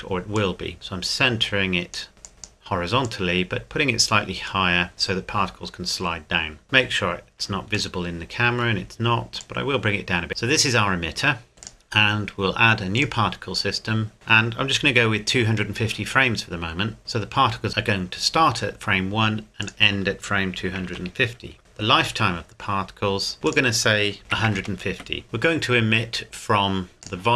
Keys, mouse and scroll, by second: 2.4 click, 4.7 middle click, 6.2-6.6 scroll down 1, 6.6 KP_0, 7.9 shift+middle click, 9.4 click, 11.6 click, 13.0 click, 19.6 click, 20.6 KP_2, 20.9 KP_5, 20.9 KP_0, 21.6 KP_Enter, 23.5 click, 24.2 KP_1, 24.3 KP_5, 24.5 KP_0, 24.9 KP_Enter, 27.0 click.